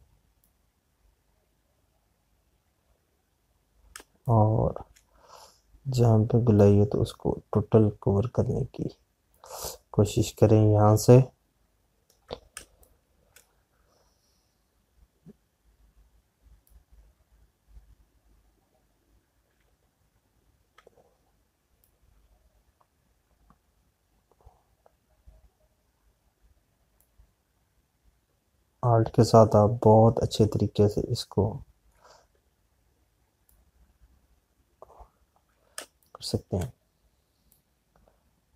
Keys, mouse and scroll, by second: 2.3 click, 5.5 space, 10.4 alt+click, 13.4 space, 17.8 click, 23.1 click, 28.5 click, 34.5 alt+click, 36.6 space, 36.9 click, 37.4 space.